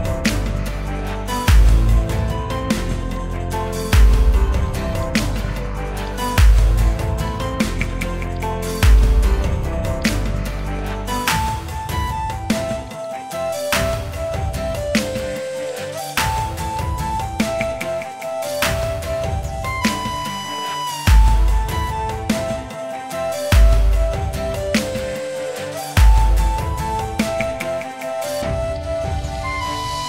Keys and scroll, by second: 6.0 Delete, 13.5 ctrl+z, 15.6 space, 16.9 space, 20.1-22.5 typing, 24.0 Left, 24.3 Right, 24.5 shift+l, 24.6 space, 25.2 Return.